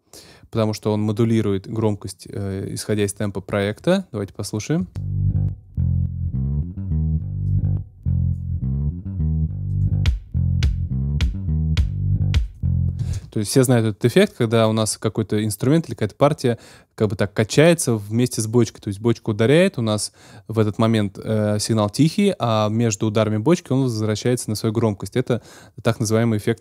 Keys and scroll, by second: 4.7 space, 12.9 space.